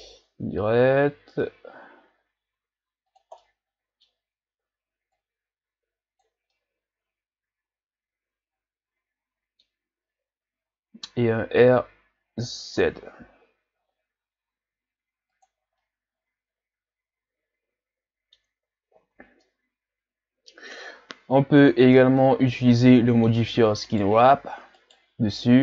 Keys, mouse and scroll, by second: 3.4-4.2 middle drag, 4.2-5.1 scroll up 2, 5.1-6.5 drag, 6.5-9.5 middle drag, 11.6 r, 15.7 scroll down 2, 15.8-18.8 middle drag, 18.9 scroll down 4, 19.4-23.9 middle drag, 23.9 right click, 24.8 right click.